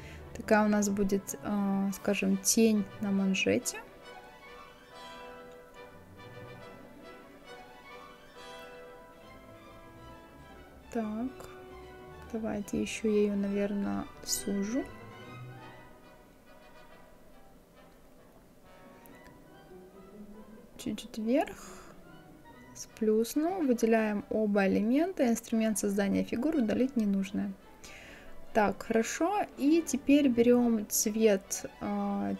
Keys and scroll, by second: 19.2 Up.